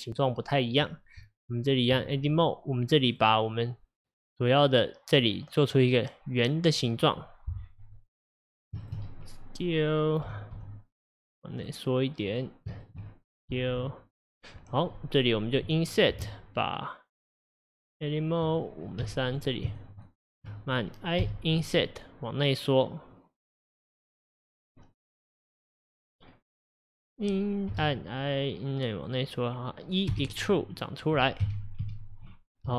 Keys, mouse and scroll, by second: 1.3 Tab, 2.4 click, 3.1 click, 6.8 click, 8.9 shift+click, 10.3 s, 12.4 click, 12.9 shift+click, 13.6 s, 15.0-16.3 middle drag, 16.3 Tab, 18.6 click, 19.1 3, 19.4 click, 19.8 shift+click, 20.1 shift+click, 20.3 shift+click, 21.3 i, 30.2 e, 31.5 KP_1, 31.9 KP_3.